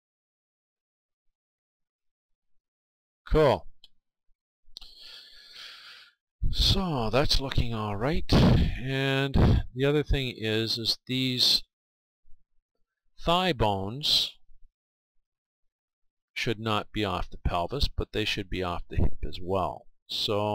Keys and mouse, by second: 0.2 middle click, 2.0-3.8 right drag, 2.8-7.0 middle drag, 11.9-13.8 right drag, 15.7-17.6 right drag, 18.6-20.5 right drag.